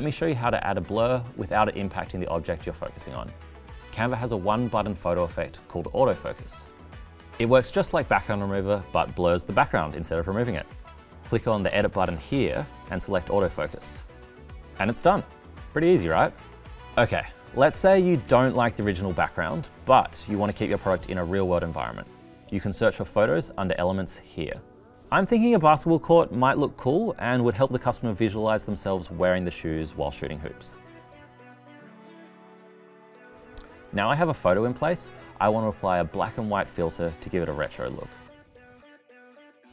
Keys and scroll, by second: 19.1 super+c, 20.6 super+v.